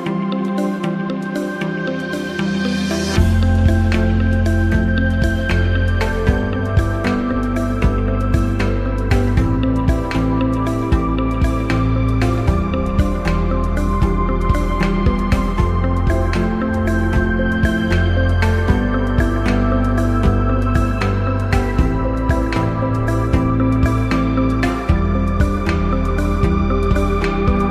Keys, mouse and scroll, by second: 0.4-0.7 click, 1.2 typing, 2.4 click, 7.5 click, 11.0-11.7 typing, 13.2 click, 16.5 click, 18.2 click, 20.5 3, 22.6-23.4 typing, 25.0 2, 27.4-27.7 typing.